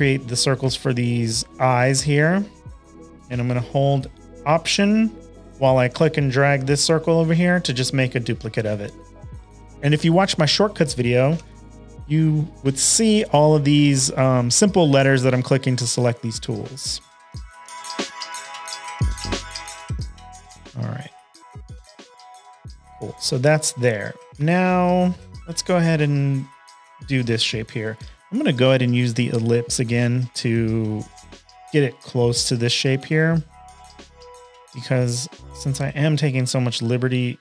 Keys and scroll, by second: 2.6 space, 2.9 shift+super+a, 3.1 v, 9.7 space, 9.7 v, 11.3 p, 22.4 shift+super+a, 22.6-24.3 typing, 23.0 super+-, 23.1 super+-, 23.2 super+-, 25.7 space, 32.1 v, 35.5 Left, 35.7 Left, 36.2 s.